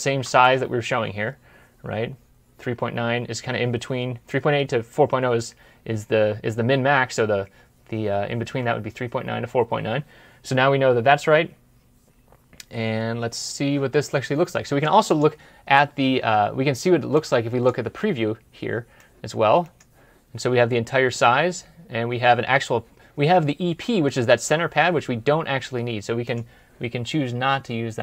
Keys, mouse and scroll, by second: 0.0 alt+Tab, 8.3 alt+Tab.